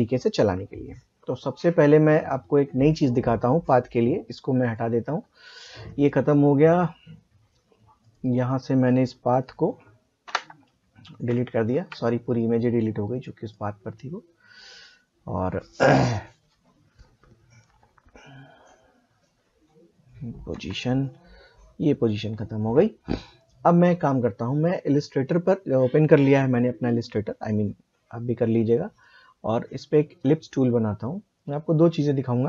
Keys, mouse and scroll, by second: 2.2 click, 8.0 click, 13.5 click, 20.5 p, 21.4 click, 24.6 click, 28.6-32.4 drag.